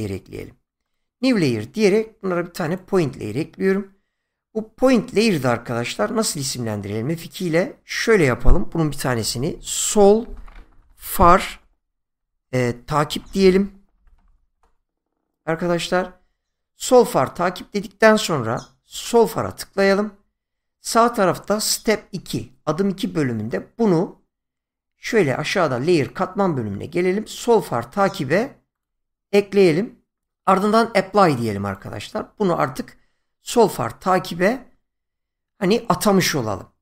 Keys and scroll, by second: 6.3 F2, 9.1-14.7 typing.